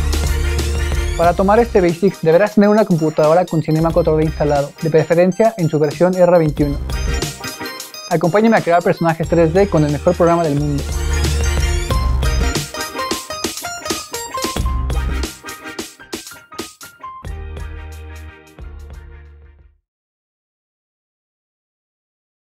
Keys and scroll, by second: 1.1 typing.